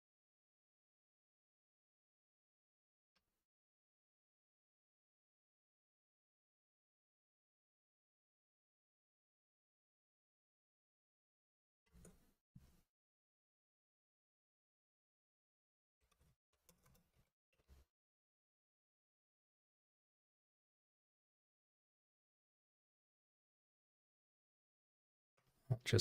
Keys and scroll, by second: 3.8 ctrl+Tab, 6.1 super+c, 11.5 super+c, 12.1 ctrl+Tab, 17.7 super+v, 20.4 super+BackSpace.